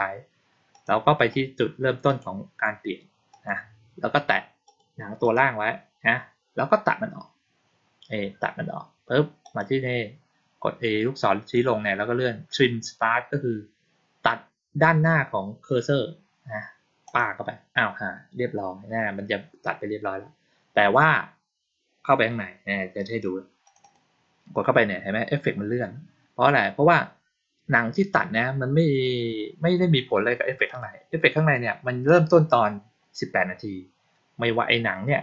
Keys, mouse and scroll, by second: 0.6 click, 1.1 right click, 2.0 click, 3.2 click, 4.6 click, 5.1 click, 9.3 click, 17.0 click, 23.6 click, 23.7 click, 30.6 click.